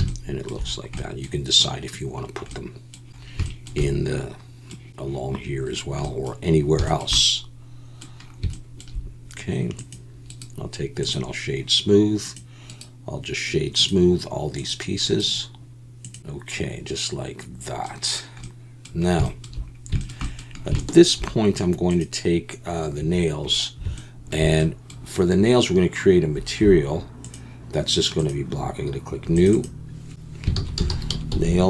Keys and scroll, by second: 16.2 alt+a.